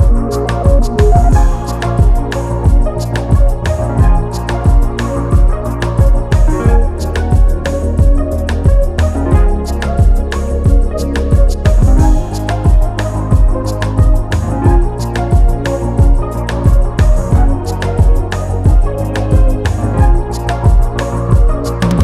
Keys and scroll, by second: 7.4 ], 7.8 [.